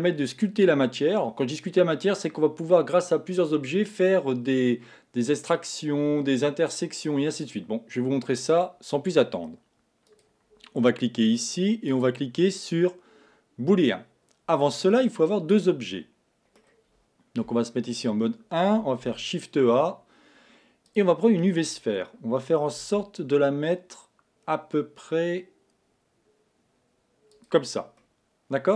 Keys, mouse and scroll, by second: 10.5 click, 11.9-15.1 drag, 15.1-17.5 middle drag, 17.5 KP_1, 19.1 shift+a, 23.5 s, 28.0-28.7 middle drag.